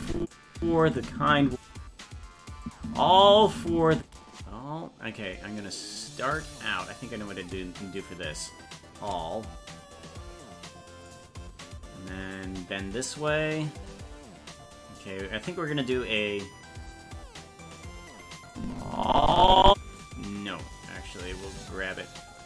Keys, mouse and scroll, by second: 0.6 space, 2.6 click, 2.8 space, 7.9-9.0 shift+drag, 10.4 click, 12.3-13.6 drag, 16.2-17.8 drag, 18.5-20.0 drag, 20.8 right click, 21.3 g.